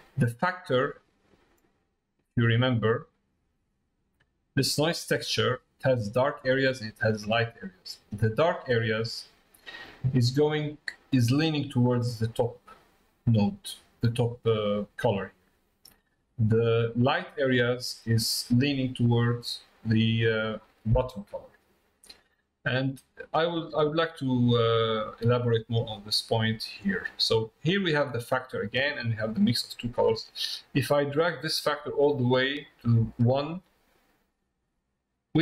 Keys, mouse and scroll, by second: 2.1-3.5 drag, 24.1-25.2 drag, 26.2 click, 31.6-34.8 drag.